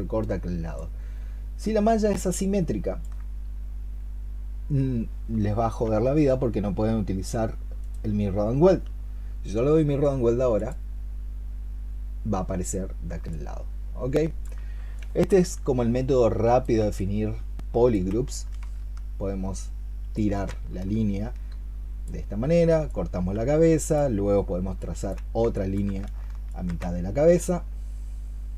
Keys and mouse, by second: 0.6 alt+click, 13.1 alt+click, 20.0 ctrl+shift+click, 24.8 space, 25.4 alt+click.